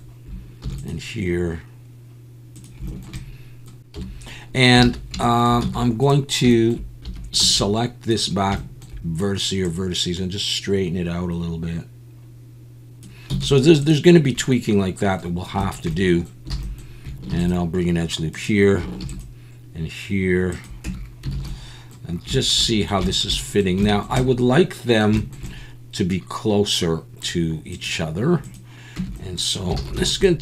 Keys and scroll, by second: 0.6 ctrl+r, 3.9 KP_7, 4.8 alt+a, 5.6 z, 7.0 1, 7.4 b, 13.3 z, 16.6 alt+a, 17.3 ctrl+r, 19.0 ctrl+r, 20.8 Tab, 21.3 alt+a, 29.0 Tab, 29.8 alt+a.